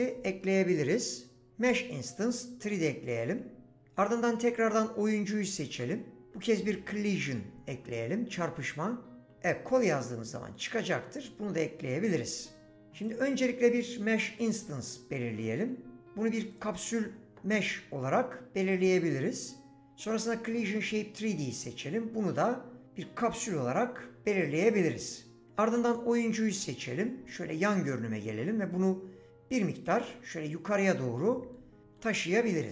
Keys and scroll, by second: 5.7 ctrl+a.